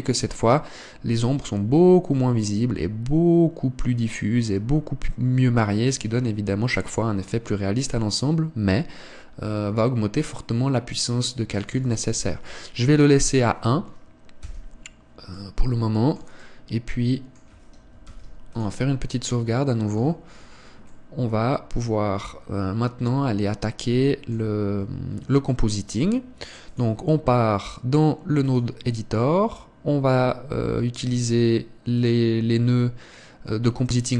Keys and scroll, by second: 15.3 Escape.